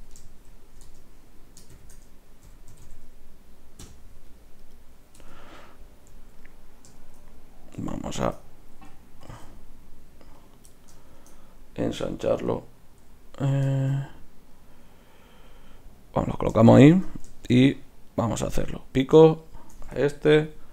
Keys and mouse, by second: 5.2 Tab, 5.6 middle click, 7.7 Tab, 9.2 s, 16.9 Tab, 20.3 ctrl+p.